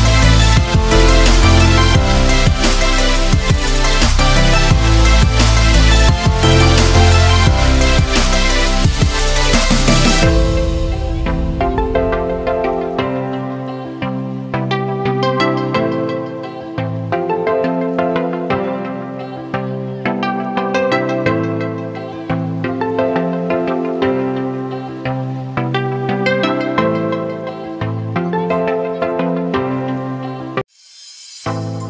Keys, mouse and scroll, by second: 2.4 ctrl+z, 2.8 ctrl+space, 3.0 ctrl+click, 3.0-3.8 typing, 4.0 ctrl+click, 11.0 space, 11.2 click, 11.5 space, 12.4-15.4 drag, 15.4 space, 15.6 click, 15.9 space, 16.8-20.1 drag, 20.1 space, 20.4 click, 20.7 space, 21.6-24.3 drag, 24.3 space, 24.5 click, 25.6-27.8 drag, 27.8 space.